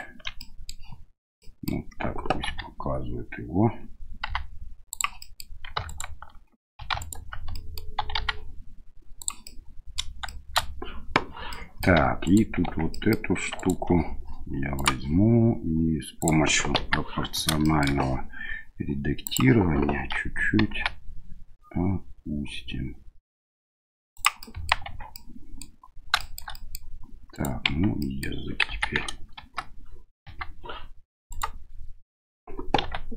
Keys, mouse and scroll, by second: 0.4 middle click, 1.4 middle click, 2.5 s, 5.2 middle click, 5.9 alt+right click, 6.8 2, 7.0 alt+right click, 7.5 middle click, 8.0 s, 9.5 middle click, 10.3 middle click, 11.6 middle click, 12.0 Tab, 12.2 right click, 12.6 Tab, 12.9 middle click, 13.6 alt+right click, 14.8 right click, 16.2 click, 16.8 KP_1, 17.6 shift+middle click, 19.3 click, 20.7 g, 24.4 middle click, 24.9 Tab, 25.1 middle click, 26.1 shift+middle click, 26.5 middle click, 27.3 right click, 27.7 Tab, 28.0 middle click, 28.6 KP_1, 29.3 KP_Enter, 30.2 KP_3, 31.3 right click, 32.8 1.